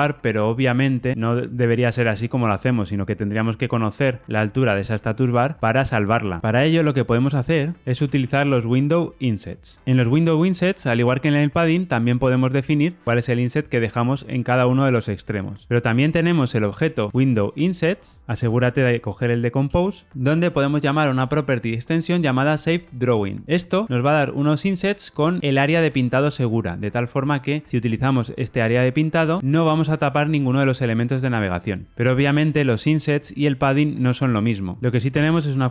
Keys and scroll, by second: 19.6 Return, 23.0 Return.